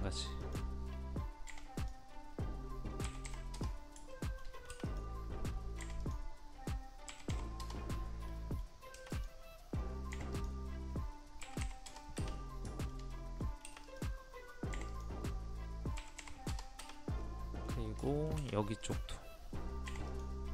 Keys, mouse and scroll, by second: 0.4 click, 1.5 p, 1.8 click, 3.1 KP_1, 4.1 shift+middle click, 4.9-6.0 drag, 7.1 KP_1, 8.3 middle click, 9.1 click, 10.1 p, 10.4 click, 11.4 KP_1, 12.7 middle click, 13.9-16.0 drag, 16.0 KP_1, 17.2 middle click, 18.1 shift+middle click, 18.8 click, 19.9 p, 20.1 click.